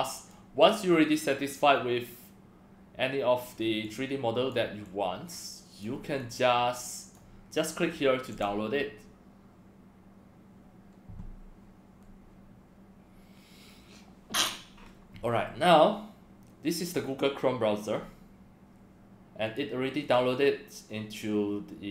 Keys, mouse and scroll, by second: 0.6-3.4 drag, 3.8-4.5 drag, 4.8-5.8 drag, 6.2-7.1 drag, 8.3 click, 19.5 click, 20.0 click.